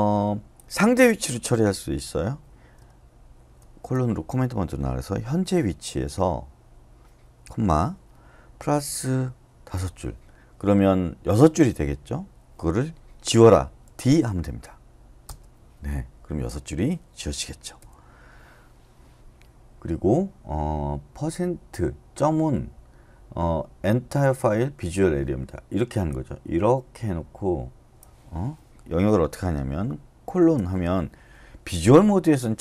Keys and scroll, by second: 3.6 shift+;, 8.7 shift+=, 9.7 5, 13.8 d, 15.2 Return, 17.8 u, 30.2 shift+;.